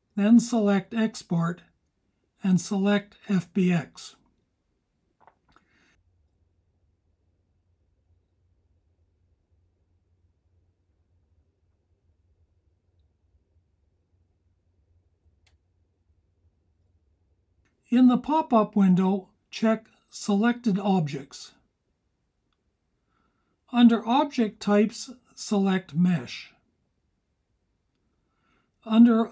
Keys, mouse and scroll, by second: 0.1-6.5 drag.